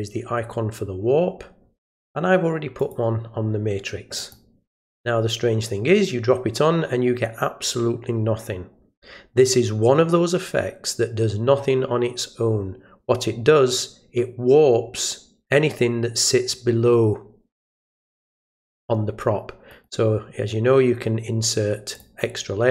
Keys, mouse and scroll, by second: 2.8 click, 4.1 click, 19.7 right click, 21.9 click.